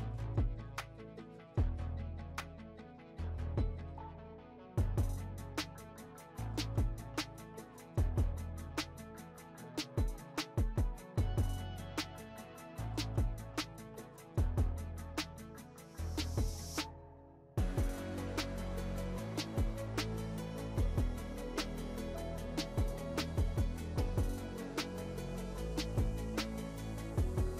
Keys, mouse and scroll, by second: 0.8 click, 1.6 click, 2.3 click, 2.5 shift+middle click, 2.6 scroll up 1, 2.7 shift+middle click, 3.3 click, 4.0 click, 4.8 click, 5.6 click, 6.4 middle click, 6.6 click, 6.9 scroll down 1, 7.0 scroll up 3, 7.1 middle click, 7.4 scroll down 1, 7.5 shift+middle click, 7.7-8.2 drag, 8.3 shift+middle click, 8.4 scroll up 2, 8.5 shift+middle click, 8.7 click, 9.4 click, 10.1-10.5 drag, 10.8 scroll down 3, 10.9 middle click, 11.1 click, 12.1 click, 12.3 scroll up 3, 12.4 shift+middle click, 12.6 click, 12.9 scroll down 3, 13.1 click, 13.9 click, 14.1 middle click, 14.3 click, 15.3 click, 16.3 click, 17.3 click, 17.5 shift+middle click, 17.6 scroll down 3, 17.7 shift+middle click, 17.8-18.2 scroll up 7, 18.2 shift+middle click, 19.2 click, 20.0 click, 20.8 click, 21.6 click, 22.9 click, 23.9 click, 24.4 shift+middle click, 24.7 click, 25.5 click, 25.9-26.4 middle drag, 26.5 click, 26.8 shift+middle click, 27.1 drag, 27.4 scroll down 2.